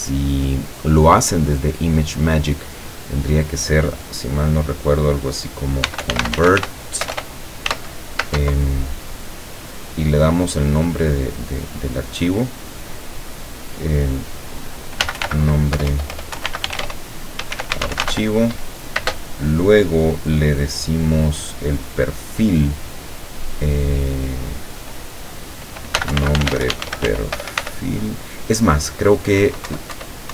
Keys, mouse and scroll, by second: 5.7-7.7 typing, 14.8-19.0 typing, 25.8-27.7 typing, 29.7 Up.